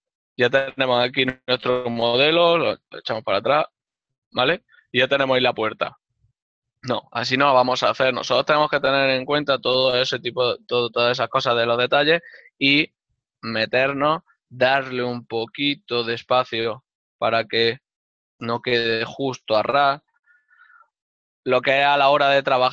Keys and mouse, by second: 5.0 Tab, 6.1 click, 6.5 ctrl+middle click, 8.9 ctrl+middle click, 9.7 Tab, 9.8 click, 12.6 click, 13.5 z, 16.5 ctrl+middle click, 18.7-19.8 typing, 20.3 shift+click, 20.9 z.